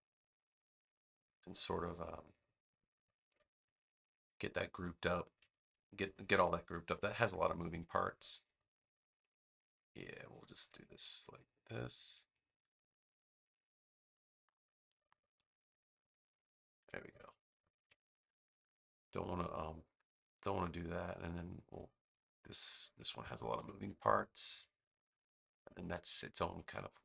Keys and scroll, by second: 10.2 v, 17.7 super+g, 23.5 super+g, 25.4 space.